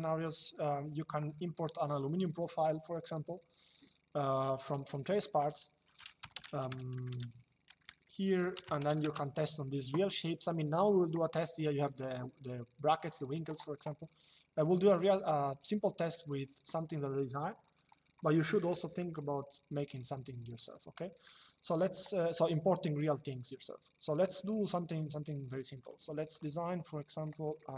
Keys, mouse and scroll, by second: 4.3 click, 6.1-7.6 typing, 8.7 KP_Enter, 15.7 click, 17.4 click, 25.5 click, 27.3 middle click.